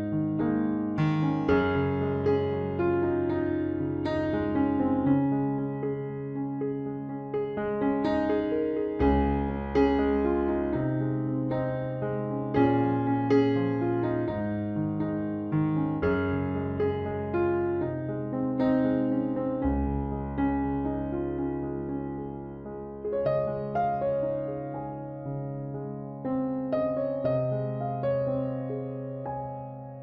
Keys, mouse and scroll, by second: 0.4 middle click, 1.7-3.4 drag, 3.5 KP_Decimal, 3.7 Tab, 4.5 KP_2, 4.6 KP_3, 6.0 z, 6.1 middle click, 8.0 Tab, 10.6 z, 11.0 Tab, 12.2 z, 16.0 ctrl+s, 17.3-20.4 middle drag, 21.7 Tab, 25.1 right click, 26.1 e, 28.0 e, 29.4 c.